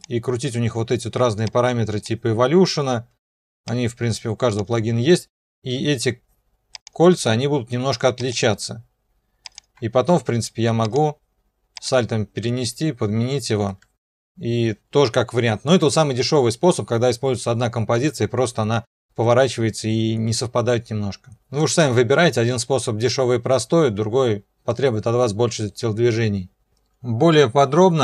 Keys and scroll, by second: 27.0 ctrl+2.